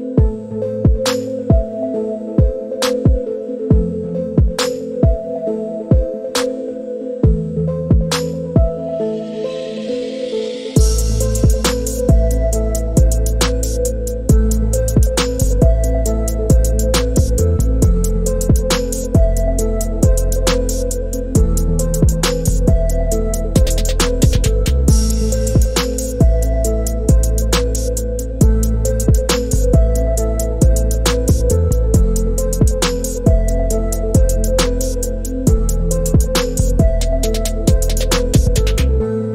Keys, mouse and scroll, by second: 1.3-3.2 right drag, 3.2 click, 5.5 click, 6.3-7.3 middle drag, 8.1 middle click, 13.2 click, 15.0 click, 15.1 right click, 16.2 click, 19.5-24.0 drag, 24.7 click, 25.3 Home, 28.6 middle click, 33.5 i, 36.3-37.7 drag.